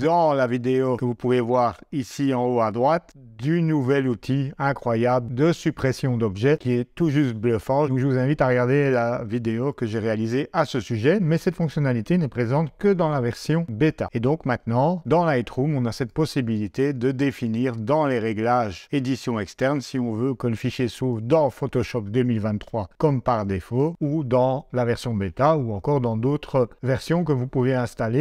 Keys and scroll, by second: 13.2 super+Tab.